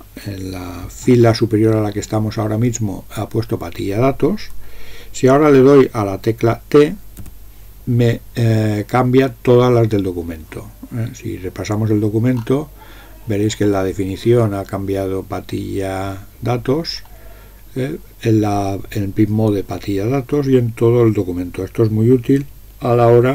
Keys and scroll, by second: 7.3 t.